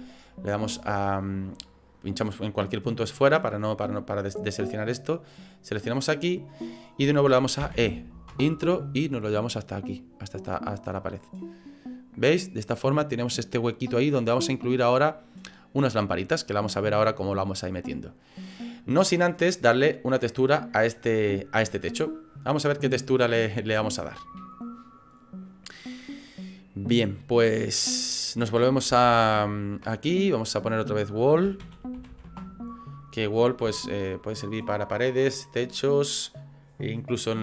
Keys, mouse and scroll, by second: 1.1 right click, 5.6 right click, 7.7 e, 9.3 click, 11.6 middle click, 19.5 click, 20.4 scroll down 3, 21.1 middle click, 22.7 scroll up 3, 23.2 middle click, 23.9 shift+middle click.